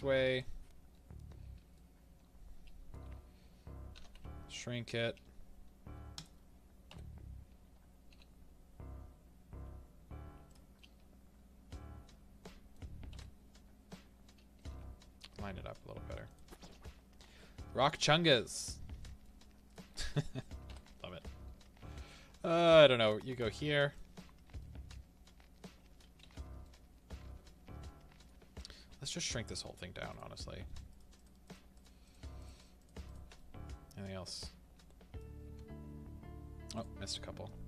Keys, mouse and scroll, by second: 0.3 click, 1.2 click, 1.7-6.2 middle drag, 3.9 s, 6.2-10.7 drag, 8.1 g, 10.7-16.3 middle drag, 14.6 g, 16.3 click, 17.8-19.7 middle drag, 19.7 click, 20.7 KP_7, 22.0 g, 23.9 click, 24.5 middle drag, 26.2 alt+a, 26.6 middle click, 28.4 a, 30.1 click, 30.9 shift+click, 33.3-36.8 middle drag, 35.4 s, 36.8 right click, 37.4-37.6 middle drag.